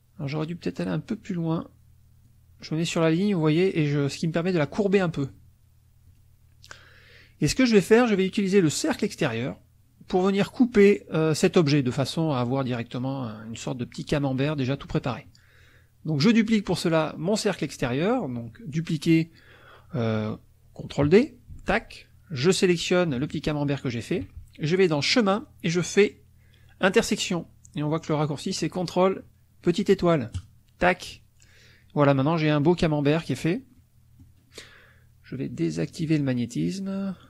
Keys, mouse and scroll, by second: 0.2 click, 2.2-5.2 drag, 6.1 click, 8.1 click, 21.5 ctrl+d, 23.2 shift+click, 25.0 click, 30.3 click, 33.7 middle click, 36.0 click, 36.9 middle click.